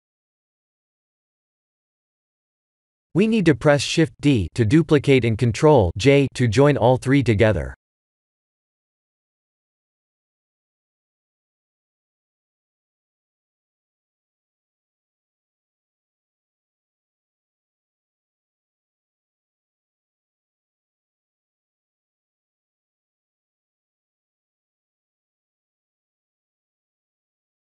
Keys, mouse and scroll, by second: 1.2 s, 3.7 shift+d, 7.8 s, 10.4 s, 13.3 click, 14.1 shift+d, 18.6 s, 21.4 middle click, 22.8 Tab, 23.3 middle click, 23.6 shift+z, 24.0 Tab, 25.2 right click, 26.4 click, 26.7 right click.